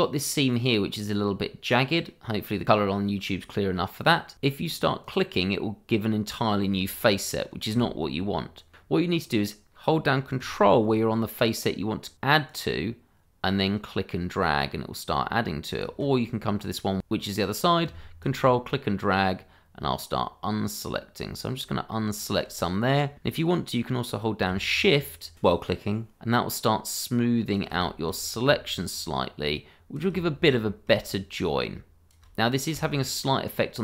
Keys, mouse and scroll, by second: 0.7-1.3 scroll up 1, 3.2-4.3 scroll down 1, 5.0 click, 7.7 ctrl+z, 8.8-10.4 scroll up 1, 12.5 ctrl+click, 16.5 click, 18.2 ctrl+click, 25.9 click, 28.2 shift+middle click, 28.9 shift+click, 30.6 middle click, 31.1 click, 32.4 middle click, 33.5 click.